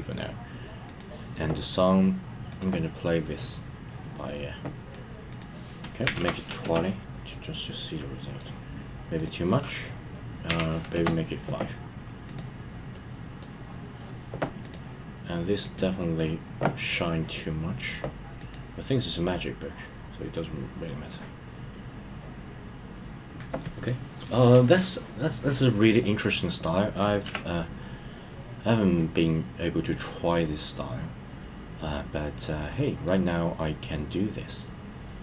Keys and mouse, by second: 0.8 click, 3.4-4.9 drag, 5.3-6.6 drag, 7.3-8.4 middle drag, 9.1-10.9 drag, 12.2 click, 12.9 middle click, 14.6 click, 15.6 click, 18.3 click, 19.1-21.1 middle drag, 29.0-33.0 middle drag.